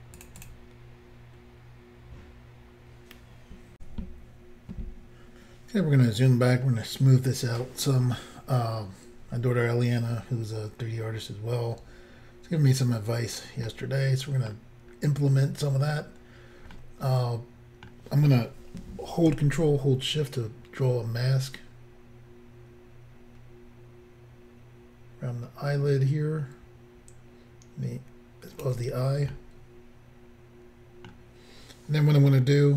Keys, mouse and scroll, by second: 3.8 Insert, 5.9-6.6 scroll down 2, 13.7 middle click, 14.9-15.7 scroll up 2, 29.4 middle click.